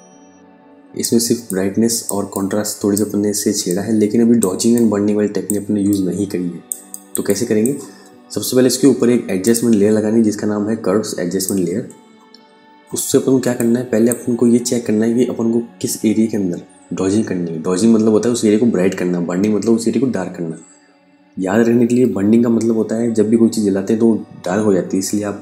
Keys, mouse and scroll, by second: 0.6 click, 3.1 ctrl+click, 6.3 ctrl+alt+click, 12.9 space, 13.0 click, 13.5 space.